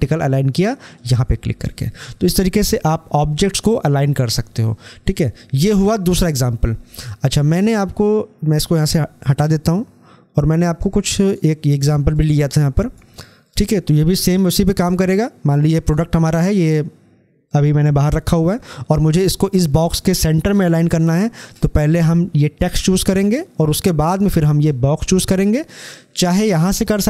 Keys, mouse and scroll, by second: 0.8 click, 6.2 scroll down 1, 7.7-10.8 drag, 10.8-13.4 drag, 15.6-19.0 drag, 20.8-24.0 drag.